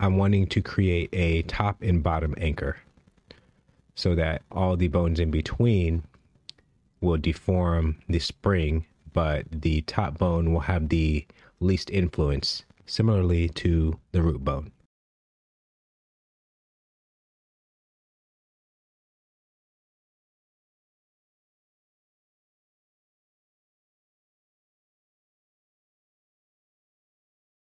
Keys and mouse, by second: 0.1 e, 0.1 z, 2.2 Tab, 6.0 Tab, 6.5 click, 18.3 shift+middle click, 20.6 click, 22.5 g, 24.8 g, 27.5 ctrl+Tab.